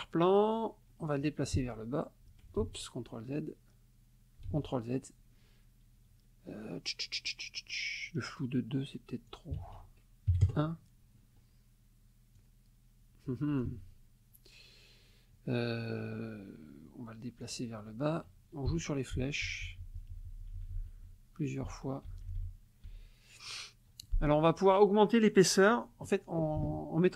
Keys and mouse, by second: 1.5 Down, 2.6 ctrl+z, 4.5 ctrl+z, 9.3 ctrl+click, 9.6 ctrl+a, 10.3 KP_1, 10.4 KP_Enter, 12.4-13.8 drag, 13.6 ctrl+z, 17.4 click, 18.7 Down, 21.6 Down, 22.1 Up.